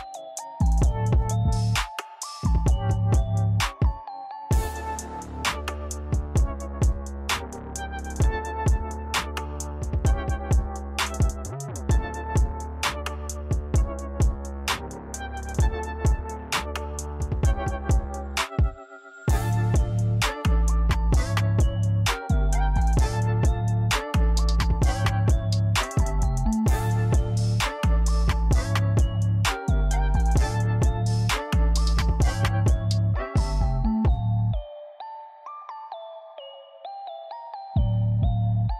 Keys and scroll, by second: 0.0-3.4 typing, 12.7 typing, 17.5-19.0 typing, 20.6 5, 20.9 Return, 22.7 z, 24.0 p, 34.3 ctrl+a, 34.5 typing, 35.3 Return.